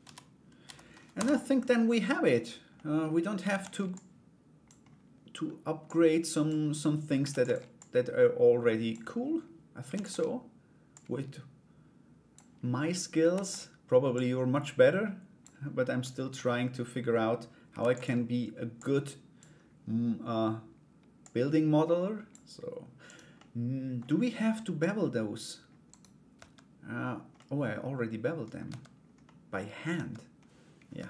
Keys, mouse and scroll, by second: 2.3 middle click, 3.1 shift+d, 3.5 click, 5.4 click, 6.9 shift+d, 7.3-8.5 drag, 10.5-11.9 drag, 12.9 shift+d, 13.8-15.0 drag, 15.6 middle click, 15.9-17.2 scroll down 1, 17.4 shift+d, 18.4 click, 20.8-21.9 drag, 22.6 right click, 22.9 middle click, 24.1 middle click, 25.5 right click, 25.9 Tab, 26.9-28.1 middle drag, 28.8 middle click.